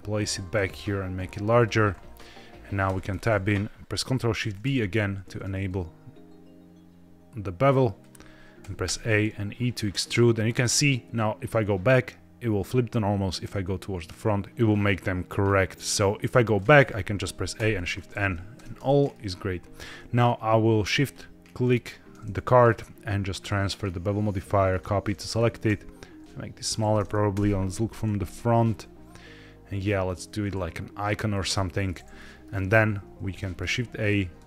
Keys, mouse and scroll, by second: 0.1 click, 0.5 s, 1.5 click, 2.8 Tab, 4.3 ctrl+shift+b, 7.9 click, 8.5 a, 8.7 e, 16.4 click, 16.7 a, 17.5 shift+n, 18.5 Tab, 18.7 middle click, 20.9 shift+click, 22.6 click, 23.3-24.7 drag, 25.1 click, 25.6 s, 26.6 click, 27.2 KP_0, 28.1 s, 31.2 click, 32.0-32.4 middle drag, 32.4-32.9 scroll down 4, 33.1 shift+a.